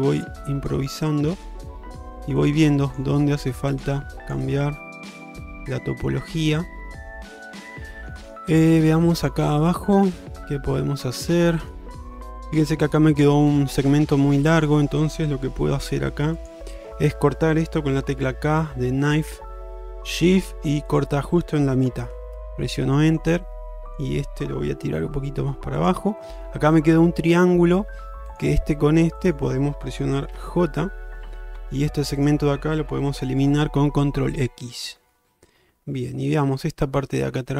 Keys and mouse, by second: 0.5 middle click, 1.6 click, 1.9 g, 3.2 g, 4.3 click, 4.7 g, 5.4 middle click, 6.4 shift+middle click, 6.7 middle click, 7.4 shift+middle click, 7.7 middle click, 8.4 shift+middle click, 9.0 middle click, 10.4-11.8 middle drag, 14.6 click, 15.8 g, 18.3 k, 22.9 middle click, 24.9 g, 26.2 middle click, 28.4 click, 30.4 j, 31.6 2, 34.1 ctrl+x, 34.8-36.2 middle drag, 36.4 shift+middle click, 37.3-37.5 middle drag.